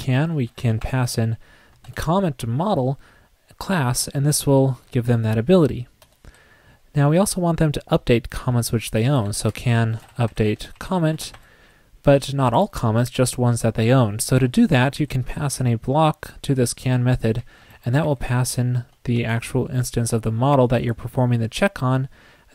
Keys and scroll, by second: 19.2 shift+Tab.